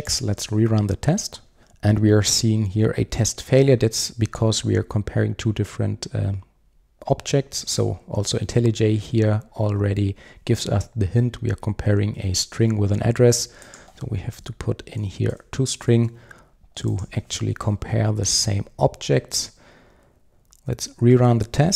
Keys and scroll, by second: 15.4 Return, 17.7 super+s, 20.8 super+r.